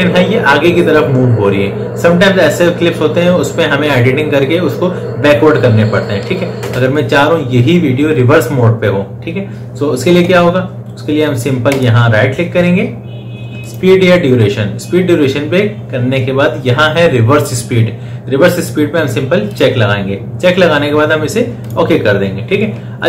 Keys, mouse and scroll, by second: 6.4 space, 11.5 right click, 13.5 click, 19.3 click.